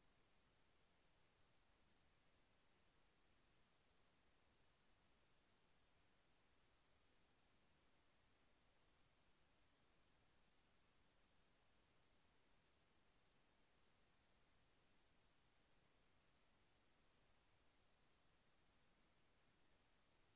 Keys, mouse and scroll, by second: 1.1 click, 4.9 click, 6.9 click, 9.3-11.1 middle drag, 11.3-14.8 middle drag, 17.8 click, 20.2 click.